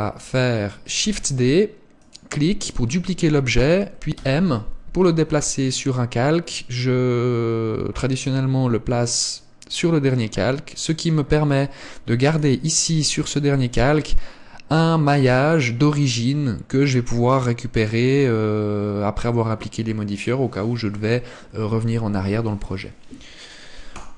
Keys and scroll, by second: 1.1 shift+d.